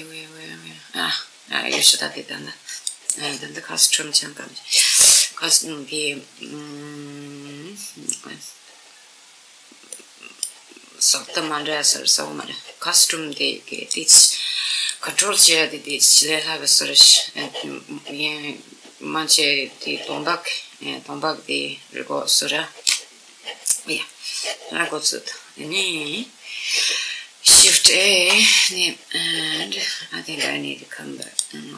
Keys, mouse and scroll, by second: 2.4 click, 9.5-11.3 middle drag, 13.4-17.4 drag, 18.2-20.8 middle drag, 20.0 scroll down 1, 24.8-27.7 middle drag, 27.7 shift+a, 30.9 click.